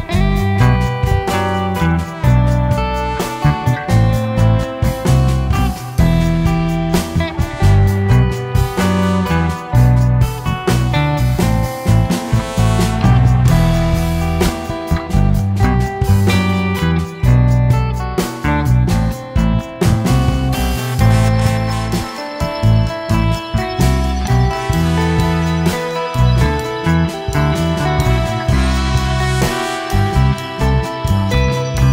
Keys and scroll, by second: 11.4 ctrl+c, 16.3 ctrl+KP_Subtract, 19.3 ctrl+v.